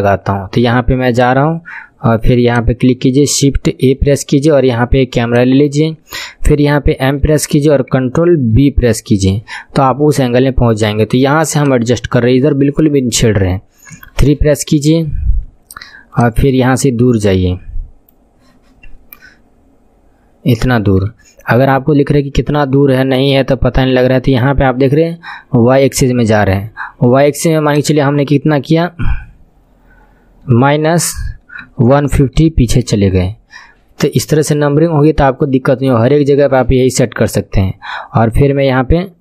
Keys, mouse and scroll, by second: 3.8 shift+a, 7.0 m, 8.7 ctrl+b, 14.0 KP_3, 14.6-15.3 scroll down 8, 16.2-19.2 drag, 16.2 scroll down 1, 19.4-20.5 scroll down 5, 20.6 scroll down 1, 21.8 n, 23.4-26.4 drag, 27.7-39.2 drag.